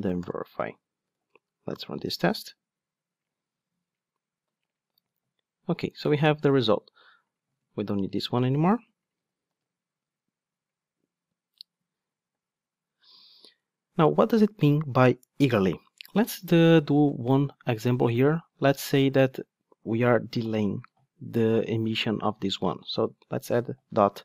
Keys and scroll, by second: 1.7 ctrl+shift+d, 7.5 super+x, 9.5 ctrl+shift+d.